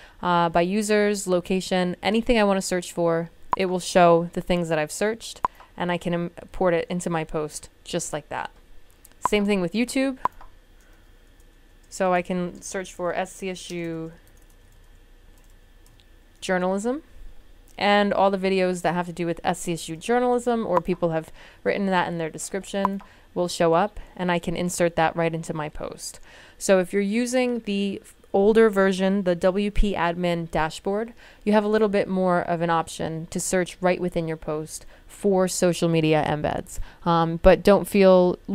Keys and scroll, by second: 11.0-16.3 typing.